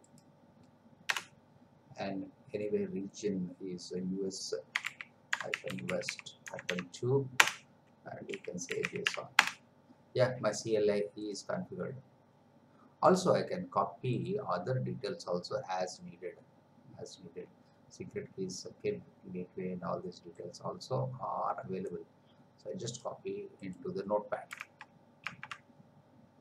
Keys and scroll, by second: 1.1 Return, 4.7 u, 7.4 Return, 8.3 j, 9.4 Return, 24.8 alt+Tab.